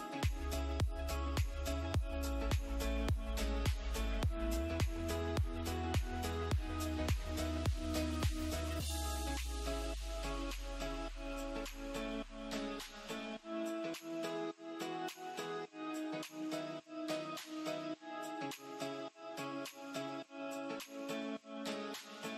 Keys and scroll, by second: 11.5 space, 13.1 ctrl+z, 14.3 Escape, 18.1 shift+Page_Down, 20.8 Escape, 21.4 F2.